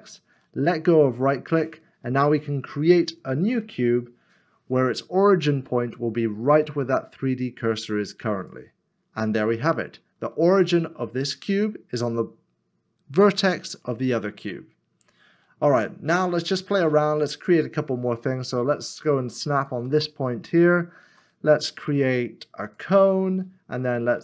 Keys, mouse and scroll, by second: 1.5 ctrl+shift+r, 1.7-2.9 scroll down 1, 3.5 shift+a, 18.5 shift+right click, 21.0 shift+a.